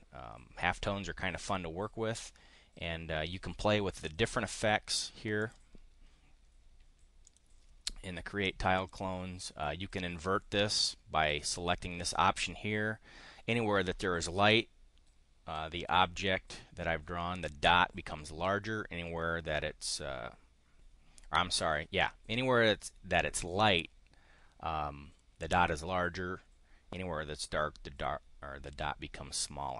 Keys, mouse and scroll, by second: 5.1 click, 7.3 click, 8.7 click.